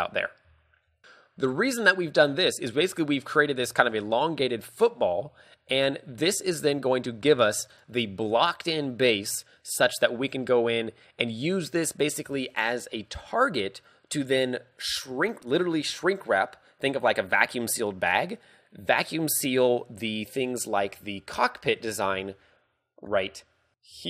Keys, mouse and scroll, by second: 0.3 scroll down 2, 0.8 shift+middle click, 1.0 scroll down 1, 1.0 a, 1.2 middle click, 2.0 middle click, 2.1 shift+middle click, 3.8 shift+middle click, 4.3 middle click, 5.2 KP_5, 5.5-6.0 scroll down 2, 5.9 middle click, 7.2 ctrl+w, 10.0-10.6 scroll up 3, 20.8-24.0 typing.